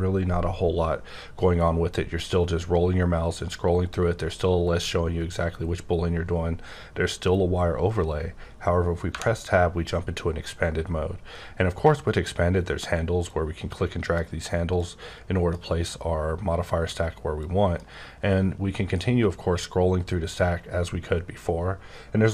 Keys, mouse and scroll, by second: 0.4-1.2 scroll up 1, 1.2-2.1 scroll up 4, 2.1-4.1 scroll up 9, 4.1-6.8 scroll up 8, 6.8-7.4 scroll up 1, 7.4-8.8 scroll up 2, 13.2 click, 14.7 click, 17.4 click, 18.1 scroll up 8, 18.8-19.3 scroll down 9, 19.3-20.5 scroll up 21, 20.6-21.2 scroll down 8, 21.2-22.3 scroll up 4.